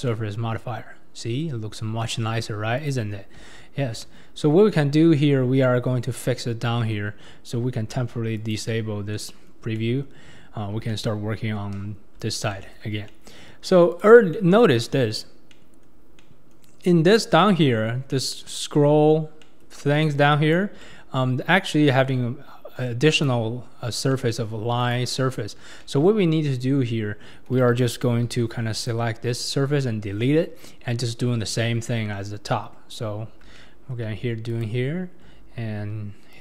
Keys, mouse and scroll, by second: 0.1-1.6 middle drag, 2.0 middle click, 2.8 click, 3.4 Tab, 3.9 Tab, 4.4 Tab, 5.6-6.9 middle drag, 6.9 Tab, 8.4 click, 9.1 middle click, 9.7 scroll up 1, 9.8-11.7 middle drag, 11.7 ctrl+KP_3, 12.5-13.9 shift+middle drag, 13.9 click, 14.3-20.0 middle drag, 20.0 click, 20.8-23.1 middle drag, 23.1 click, 24.1 middle click, 24.8 click, 25.8-28.3 middle drag, 28.3 3, 28.8 click, 28.9-31.6 drag, 28.9-31.6 middle drag, 28.9-31.6 right drag, 32.1-33.9 middle drag, 33.9-34.5 scroll down 2, 34.5 shift+click, 36.3 ctrl+click.